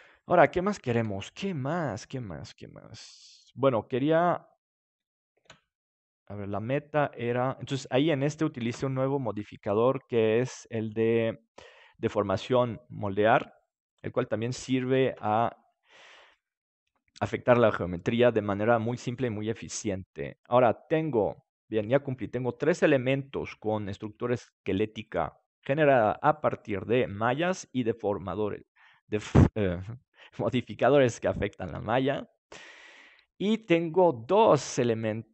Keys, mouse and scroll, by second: 0.9 KP_7, 2.7-4.5 drag, 5.3 shift+d, 7.4-9.6 drag, 8.0-9.2 right drag, 8.6 ctrl+s.